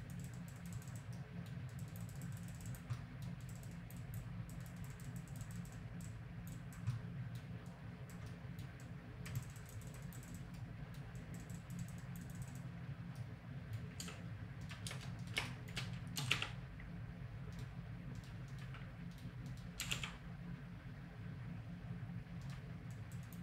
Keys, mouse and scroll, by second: 4.9-6.9 drag, 12.2 click, 14.0 a, 14.6-15.9 drag, 16.2 r, 18.2-22.4 right drag, 19.8 r, 22.9-23.4 drag.